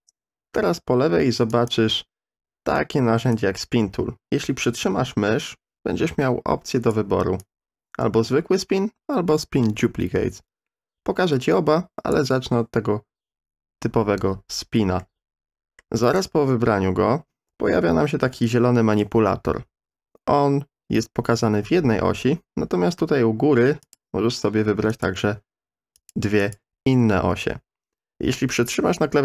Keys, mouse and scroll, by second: 1.6-2.2 right drag, 3.5-6.9 drag, 7.4-12.1 drag, 15.0 middle click, 23.8 click, 24.9 click, 26.0 click, 26.4 click.